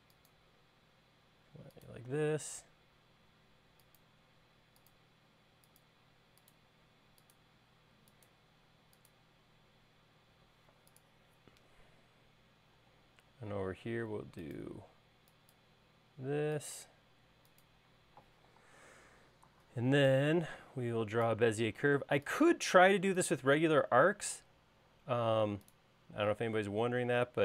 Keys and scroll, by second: 13.4 i.